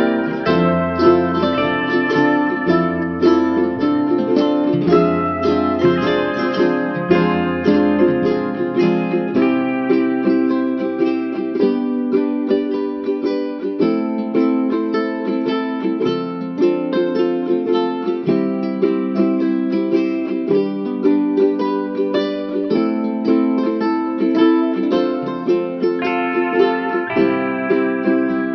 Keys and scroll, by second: 6.5 b, 9.7 b, 17.5 ctrl+a, 19.2 BackSpace, 24.3 ctrl+d.